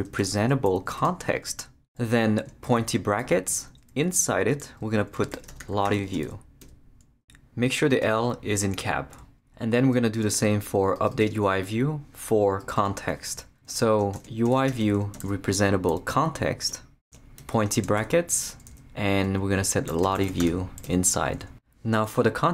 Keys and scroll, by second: 0.0-0.9 typing, 1.0 Return, 2.6 shift+,, 2.8 shift+., 3.5 shift+Left, 4.0 Left, 5.1-6.7 typing, 13.9-15.7 typing, 16.7 Return, 17.4 shift+,, 17.9 shift+., 18.7 shift+Left, 19.2 Left, 19.6-21.0 typing.